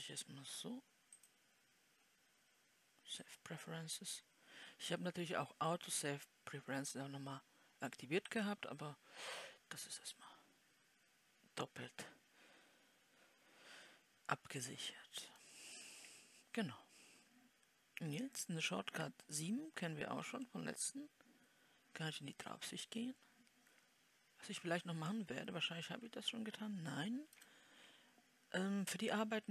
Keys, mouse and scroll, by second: 10.6-20.7 middle drag, 20.7 KP_7.